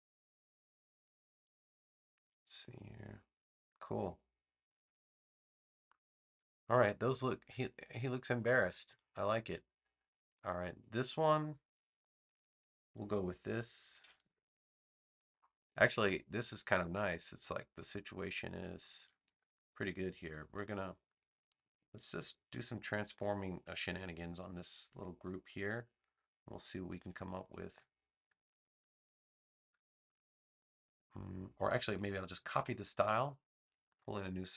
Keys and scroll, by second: 7.9 space, 13.9 super+c, 14.1 super+v, 18.9 super+z, 32.5 super+c.